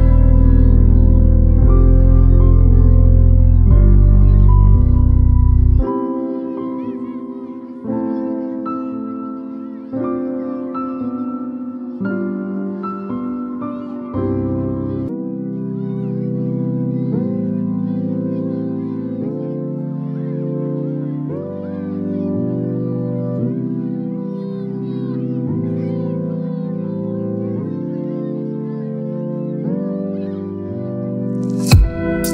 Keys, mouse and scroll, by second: 9.2 v, 9.6 ctrl+t, 11.8-12.8 shift+drag, 13.8-15.5 shift+drag, 16.6-24.2 shift+drag, 29.6 click, 29.7 t, 31.4-32.3 drag.